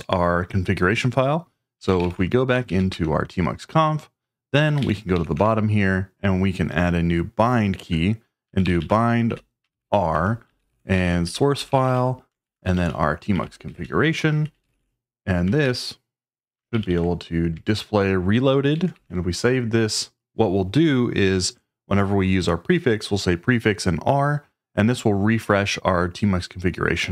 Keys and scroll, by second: 1.5-5.3 typing, 2.7 Tab, 2.9 Return, 8.2-15.3 typing, 15.6 Right, 16.8 ctrl+g, 16.9 ctrl+g, 17.5 Escape, 18.5-19.4 typing.